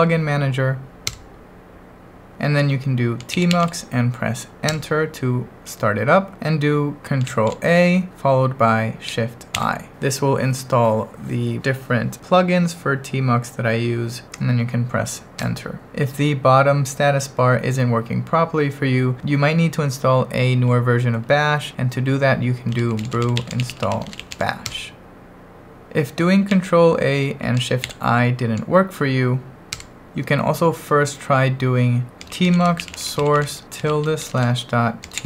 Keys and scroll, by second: 1.1 Return, 3.0-4.0 typing, 4.7 Return, 7.2 ctrl+a, 9.5 shift+i, 15.4 Return, 15.9 ctrl+1, 22.5-24.8 typing, 26.5 ctrl+a, 27.8 shift+i, 29.8 Return, 31.9-35.2 typing.